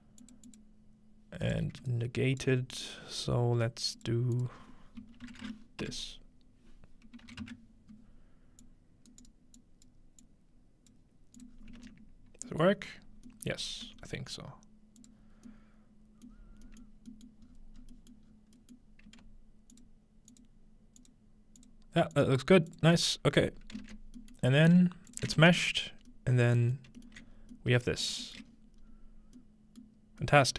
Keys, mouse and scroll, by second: 1.5-2.6 right drag, 2.6-6.3 alt+drag, 8.6 click, 9.1 right click, 9.6 click, 10.2-11.5 drag, 11.5 click, 11.5 scroll down 1, 12.5 middle click, 12.9-15.0 scroll down 1, 13.9 typing, 15.0 click, 16.4 middle click, 16.6-17.5 scroll down 1, 16.9 middle drag, 17.4 middle click, 17.5-19.7 scroll up 4, 17.9 middle click, 18.0 middle click, 19.0 alt+shift+middle click, 19.7-22.8 alt+shift+drag, 23.3-24.5 scroll down 2, 23.8 ctrl+space, 24.4 middle click, 24.5 scroll up 2, 24.8-26.1 alt+shift+middle drag, 24.8 typing, 25.1-26.1 ctrl+alt+shift+drag, 25.4 ctrl+space, 25.6-26.4 ctrl+scroll up 1, 26.9 middle click, 27.1-27.5 alt+middle drag, 27.3-30.2 scroll up 3, 28.1-29.1 shift+middle drag.